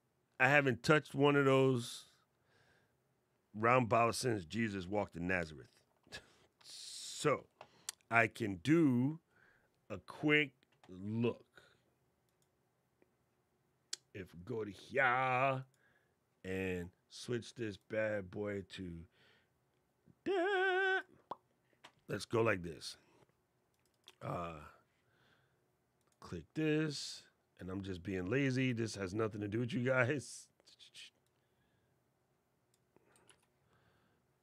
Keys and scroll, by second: 33.0 super+c.